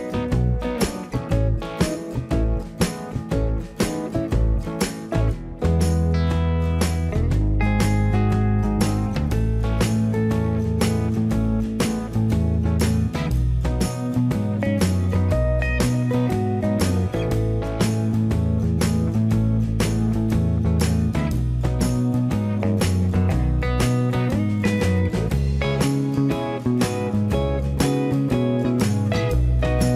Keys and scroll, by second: 7.9 Return, 9.1 space, 10.1 m, 15.3 space, 16.0 m, 27.3 space.